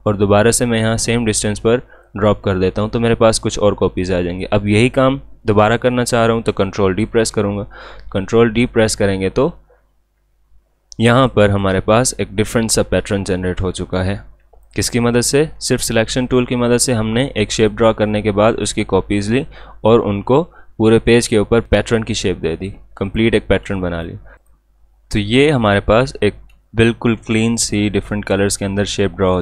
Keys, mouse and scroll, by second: 7.1 ctrl+d, 10.9 alt+scroll down 1, 11.1 space, 11.3 click, 11.6 space, 13.2 alt+scroll up 1, 13.8 space, 14.7 alt+scroll down 1, 15.0 space, 15.1 click, 15.5 space, 16.2 click, 21.5 alt+Num_Lock, 21.6 space, 23.1 click, 23.7 space, 23.8 click, 25.0 alt+scroll down 1, 25.3 space, 25.4 click, 26.2 alt+scroll up 1, 26.6 space, 26.7 click, 27.1 space.